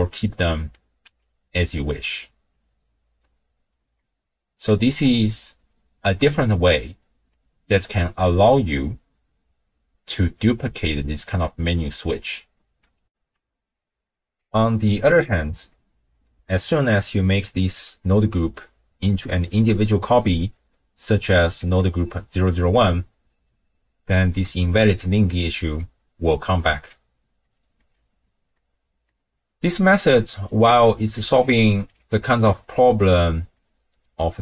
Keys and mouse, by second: 1.1 n, 2.5-3.7 drag, 4.1 middle click, 7.3-8.6 drag, 13.1 ctrl+alt+shift+w, 13.1 ctrl+alt+shift+q, 21.6 click, 27.5 click, 27.7 x, 28.5 middle click, 28.6 click, 30.0-30.5 drag, 31.2-31.9 drag, 32.0 g, 33.5 click.